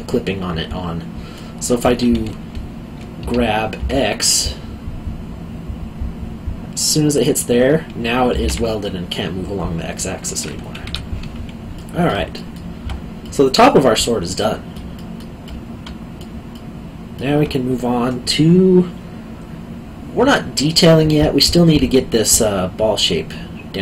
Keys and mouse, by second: 0.1 middle click, 3.2 g, 3.7 x, 7.1 click, 8.3 g, 8.4 x, 10.8 Escape, 11.7 middle click, 12.3 alt+middle click, 14.9 alt+middle click.